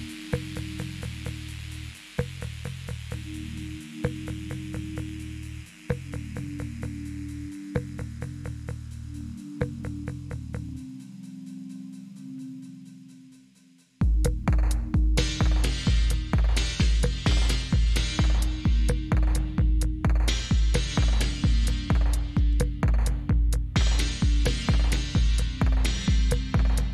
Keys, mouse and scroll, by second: 0.7 click, 1.4 click, 3.4 click, 5.6 click, 7.2 click, 8.8 click, 9.7 click, 10.2 click, 10.8 click, 13.1 click, 17.8 click, 22.5 click, 23.2 click, 24.9 click.